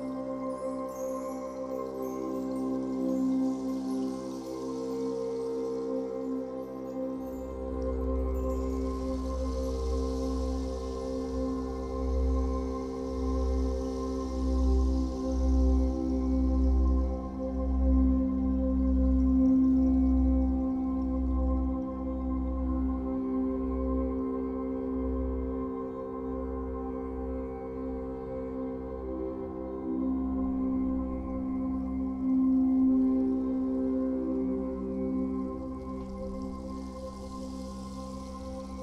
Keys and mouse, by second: 0.0 click, 0.5 click, 2.0 alt+click, 3.5 click, 4.7 click, 5.9 1, 6.4 g, 8.9 click, 8.9-10.2 typing, 12.0 click, 12.0 typing, 14.8 click, 15.7-16.7 alt+drag, 17.1 1, 17.6 g, 18.3 z, 20.9 Escape, 21.6-30.6 alt+drag, 30.6 g, 31.3 Escape, 33.0 n, 35.5-38.8 drag.